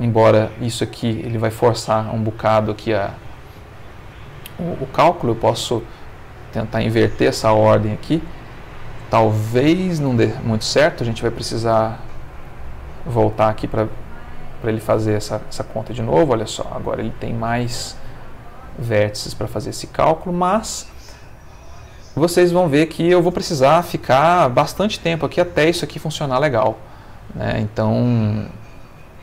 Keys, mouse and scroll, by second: 5.4-6.7 drag, 7.5-9.1 middle drag, 12.4 click, 13.2 space, 18.8-20.5 middle drag, 20.9-22.9 ctrl+middle drag, 25.7 Escape, 27.8-28.8 drag.